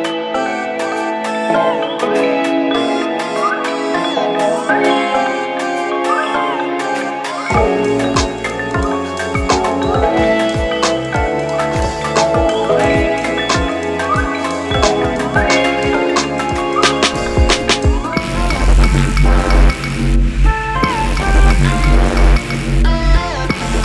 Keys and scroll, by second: 5.8 ctrl+z, 10.6 ctrl+z.